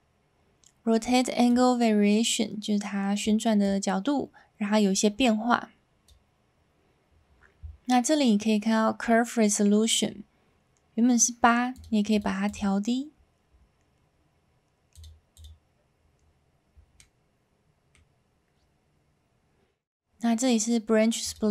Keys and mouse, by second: 1.4-3.2 drag, 3.7-6.0 drag, 11.7 click, 14.9 click, 15.3 click, 17.0-17.9 middle drag, 21.4-21.5 drag.